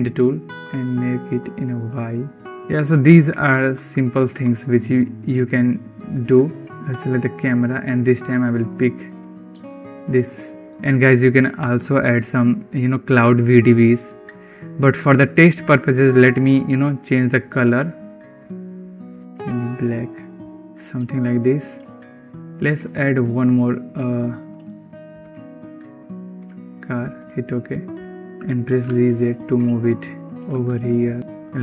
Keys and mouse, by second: 0.8 click, 3.7 ctrl+s, 7.2 click, 8.4 click, 9.0 click, 10.6 ctrl+s, 17.7 click, 24.4-28.1 drag, 28.6 g, 30.4 r, 31.4 click.